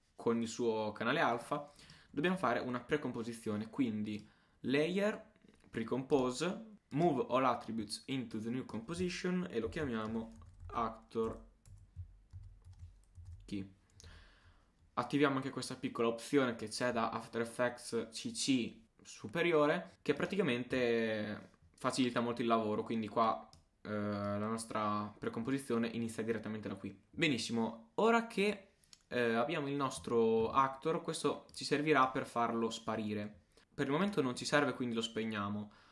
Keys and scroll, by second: 9.7 shift+a, 10.1 shift+c, 12.0 shift+BackSpace, 12.4 shift+-, 12.7 shift+k, 13.2 shift+e.